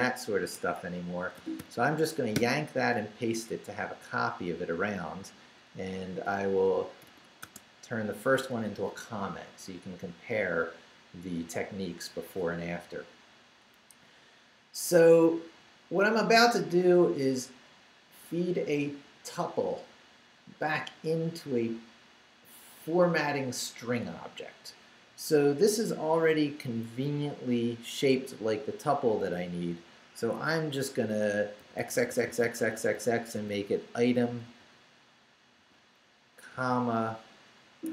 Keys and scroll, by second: 0.5 Escape, 1.3 y, 2.3 p, 3.4 Up, 6.7 shift+i, 7.0 shift+3, 7.4 shift+space, 8.3 ., 25.7 Right, 30.2 Escape, 30.9 Right, 31.6 x, 35.6 x, 36.5 ., 37.8 Escape.